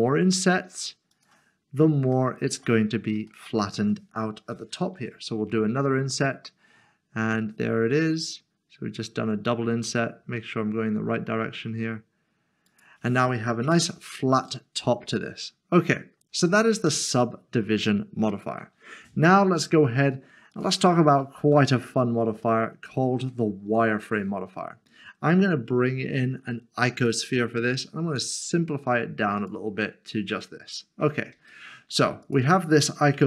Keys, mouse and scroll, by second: 1.1 click, 2.0 s, 2.1 shift+middle click, 3.0 scroll up 1, 3.3 shift+middle click, 5.0 typing, 12.7 click, 14.2 scroll down 1, 14.7 middle click, 16.3 scroll down 1, 16.9 middle click, 20.5 click, 21.5 Delete, 22.5 shift+middle click, 26.7 a, 27.1 click, 29.4 click, 30.7 middle click, 31.7 shift+middle click, 32.2 click.